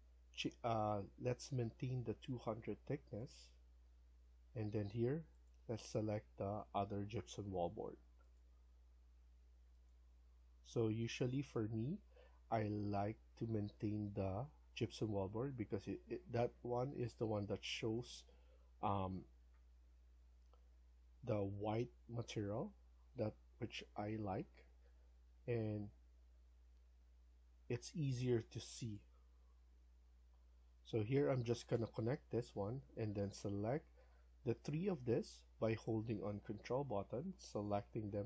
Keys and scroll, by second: 0.6 1, 32.2 Escape, 32.5 Escape.